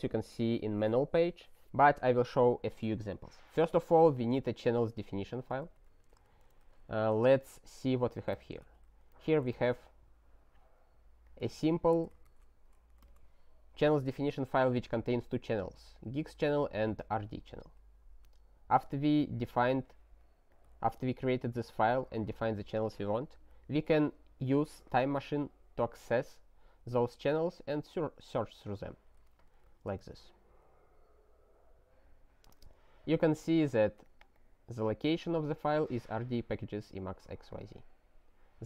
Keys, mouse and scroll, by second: 5.8 ctrl+/, 6.5 ctrl+f, 11.2 click, 11.7 ctrl+a, 12.2 ctrl+alt+@, 13.0 ctrl+g, 17.6 super+w, 18.8-20.5 scroll, 20.5 click, 20.9 ctrl+a, 21.2 ctrl+space, 21.3 ctrl+e, 22.2 alt+w, 28.9 super+w, 29.3 ctrl+y, 29.7 Return, 34.0 click, 34.2 double click, 34.3 click, 37.5 click.